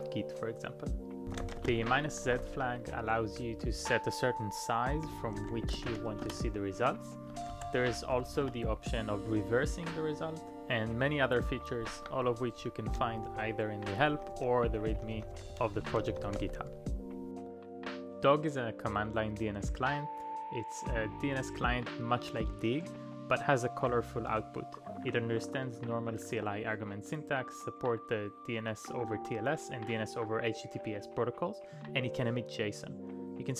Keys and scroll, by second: 1.0-3.9 typing, 5.1 space, 5.4 1, 5.9 shift+m, 6.2 Return, 7.2 ctrl+p, 7.5 space, 7.6 -, 8.1 r, 8.4 Return, 9.7 typing, 11.8 ctrl+d, 12.6-14.8 typing, 16.4 typing.